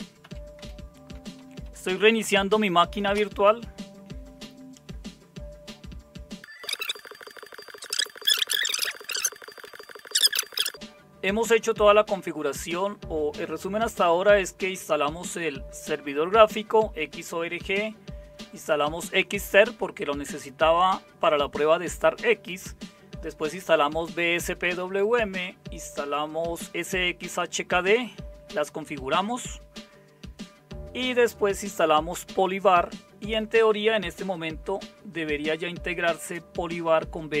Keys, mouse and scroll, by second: 0.0-3.1 typing, 8.4 Down, 8.5 Down, 8.5 Up, 9.0 Return.